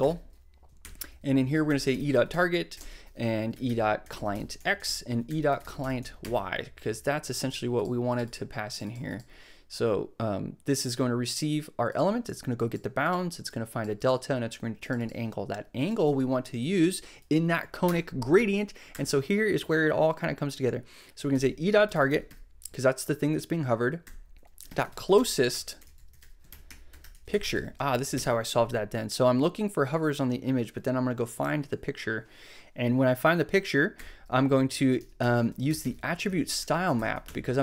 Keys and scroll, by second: 0.0-6.3 typing, 17.8 Return, 18.4 f, 18.9 BackSpace, 20.9-22.7 typing, 24.0-28.0 typing, 28.1 super+Right, 34.7-37.6 typing.